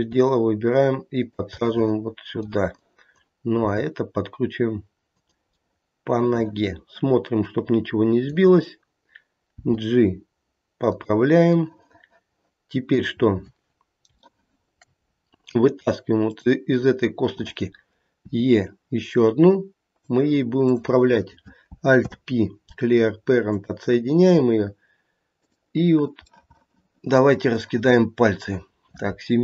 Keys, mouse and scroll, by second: 1.6 middle click, 2.1 middle click, 2.7 click, 3.6 g, 5.5 middle click, 7.3 middle click, 7.6 middle click, 8.2 middle click, 9.5 g, 11.6 middle click, 12.8 middle click, 13.2 scroll up 2, 14.2 shift+middle click, 15.0 scroll up 1, 15.8 scroll up 1, 16.2 click, 18.2 e, 20.6 click, 22.0 alt+p, 25.3 click, 26.3 middle click, 26.8 middle click, 28.0 middle click.